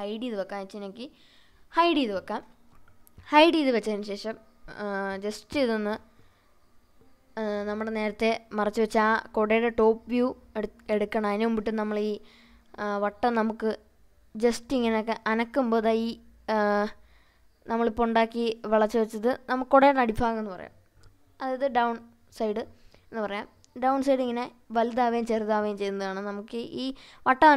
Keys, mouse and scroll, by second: 0.0-0.6 scroll up 2, 0.8-1.5 middle drag, 1.6-2.5 scroll up 3, 2.6-2.9 scroll down 2, 3.4 scroll up 2, 5.7-6.8 middle drag, 9.4 click, 10.0-10.8 scroll down 2, 11.1-11.5 middle drag, 12.1 click, 13.1 Tab, 15.2 click, 18.8 shift+click, 20.0 s, 26.9 click.